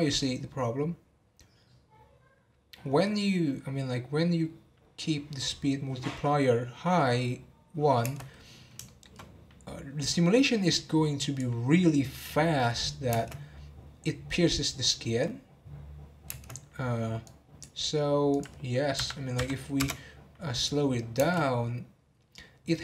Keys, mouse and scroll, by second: 8.1 space, 8.8-10.5 shift+middle drag, 10.5-12.1 drag, 12.1-13.1 middle drag, 13.1 space, 17.3-20.5 drag, 20.5-21.2 middle drag, 21.2 space.